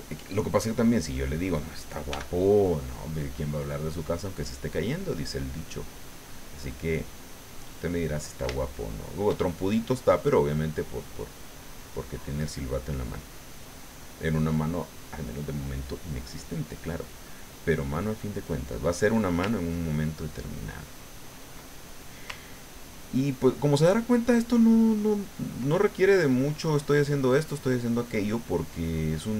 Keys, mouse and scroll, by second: 0.7 click, 2.1 f, 2.9 click, 3.3 middle click, 4.5-6.4 drag, 6.5 middle click, 8.4 shift+middle click, 8.6 shift+middle click, 10.1-11.2 middle drag, 13.2 middle click, 13.7 middle click, 14.5 middle click, 16.1 click, 16.7 click, 17.3 middle click, 19.9-21.6 ctrl+drag, 21.7 ctrl+middle click, 22.6 ctrl+click, 23.5-25.6 ctrl+drag, 26.3-29.1 drag, 29.2 middle click.